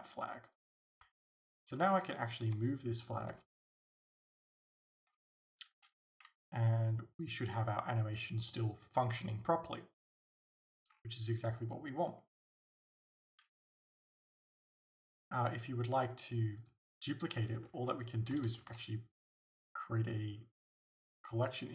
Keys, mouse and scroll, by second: 0.6 right click, 1.1 alt+a, 1.9 alt+a, 2.5 g, 3.1 right click, 3.4 s, 5.1 click, 5.2 g, 5.8 click, 6.2 alt+a, 10.0-10.4 scroll down 2, 10.9 scroll up 1, 13.2 alt+a, 16.6 click, 17.7-18.5 scroll down 1, 18.5 shift+a.